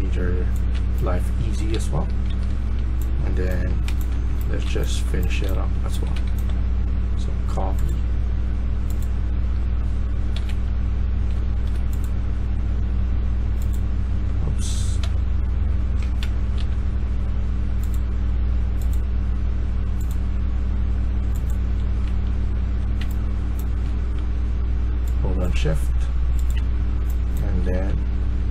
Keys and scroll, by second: 0.6-6.7 typing, 10.2 ctrl+z, 14.9 ctrl+z, 16.5 ctrl+z, 22.5-22.9 typing, 26.5-28.3 typing.